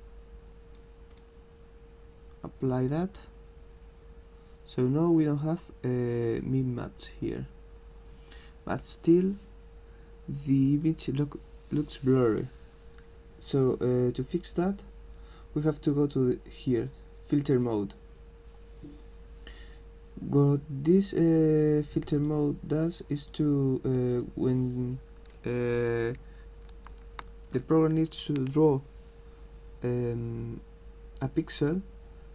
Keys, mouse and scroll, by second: 0.0-0.8 drag, 1.1 click, 2.9 click, 7.0 click, 22.1 click, 23.2 click, 24.1 click.